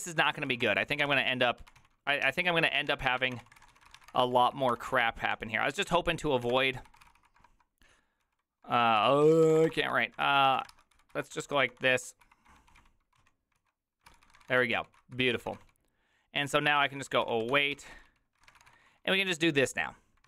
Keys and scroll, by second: 0.0-20.2 typing.